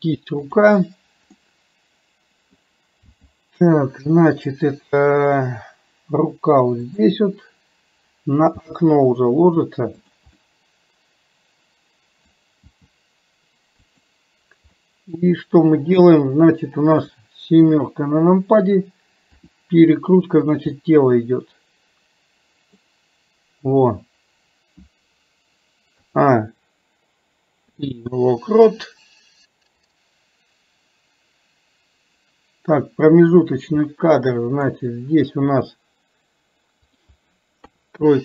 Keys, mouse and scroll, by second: 0.6 click, 1.4-2.7 middle drag, 10.4-12.3 middle drag, 15.0 middle click, 16.1 click, 20.9-22.8 middle drag, 30.0-33.6 drag, 34.0-34.8 middle drag, 37.0 click.